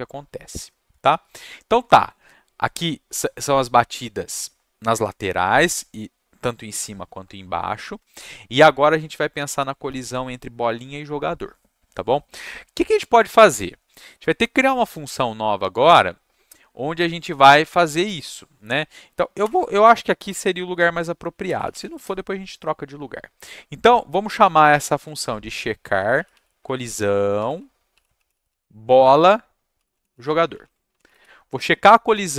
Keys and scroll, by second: 19.4 Return, 21.2-22.3 typing, 24.1-31.4 typing.